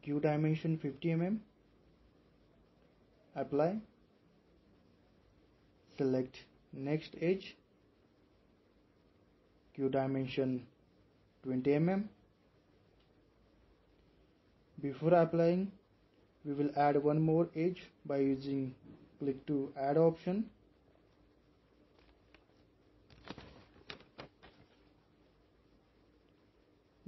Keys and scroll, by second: 2.1-2.4 typing, 11.7-12.4 typing.